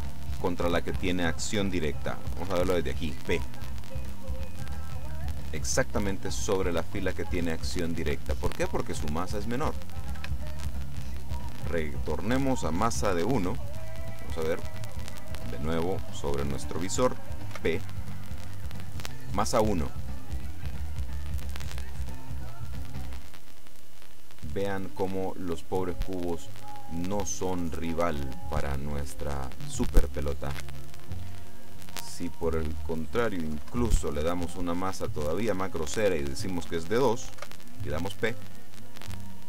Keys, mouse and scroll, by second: 0.3-0.9 scroll up 1, 2.6 p, 10.3 Escape, 12.1 click, 13.1 KP_1, 13.3 KP_Enter, 17.6 p, 30.6 Escape, 32.2 click, 33.6 KP_2, 33.8 KP_Enter, 37.5 p.